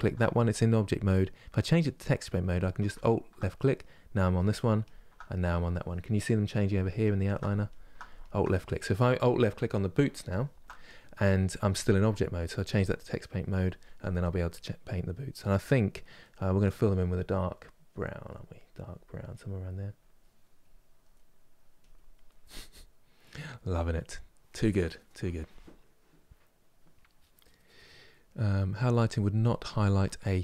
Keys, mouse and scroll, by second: 1.4-2.6 drag, 4.5 alt+click, 12.4-14.3 drag, 14.3-16.3 middle drag, 16.3-20.4 drag, 20.8 middle click, 21.5 click, 21.9-30.4 middle drag.